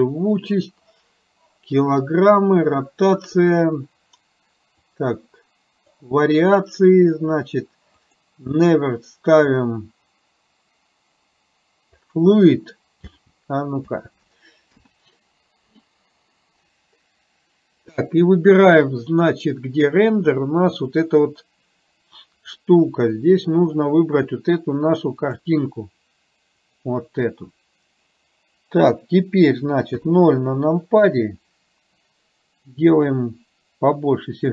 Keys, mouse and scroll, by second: 4.9 click, 8.1 click, 13.1 space, 14.0 space, 14.8 KP_0, 22.6 middle click, 29.9 KP_0, 33.3 click.